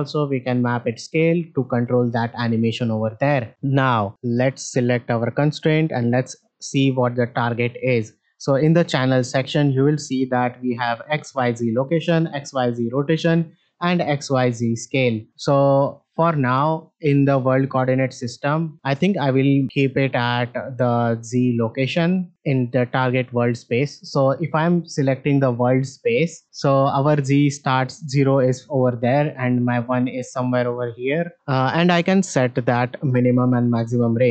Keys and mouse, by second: 9.4-15.3 drag, 18.1-18.6 shift+middle drag, 19.6-21.6 drag, 22.9-23.5 drag.